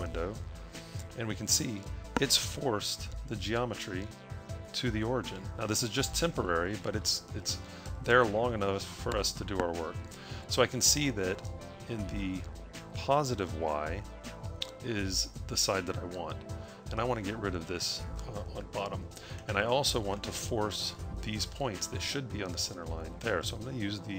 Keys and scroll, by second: 0.5 a.